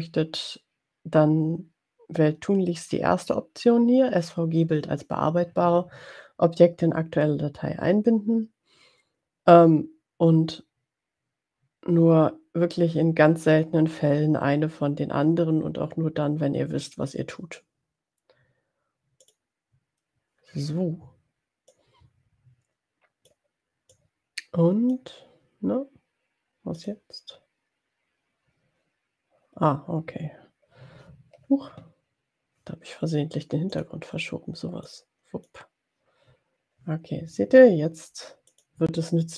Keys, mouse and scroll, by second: 21.7-23.5 drag, 23.8-25.4 drag, 26.8 click, 33.8 click, 34.9-35.9 drag, 38.4 click.